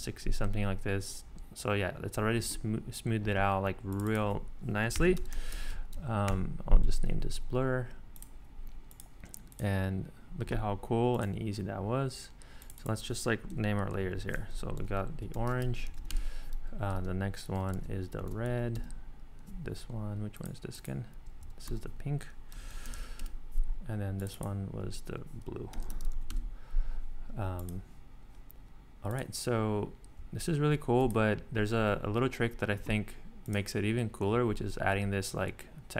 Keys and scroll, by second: 4.7-6.0 typing, 6.3 Return, 13.5 ↺, 14.1 super+r, 14.6-16.4 typing, 17.0 Tab, 17.7 super+r, 18.0-18.9 typing, 21.6 super+r, 22.3-23.4 typing, 25.5-26.6 typing.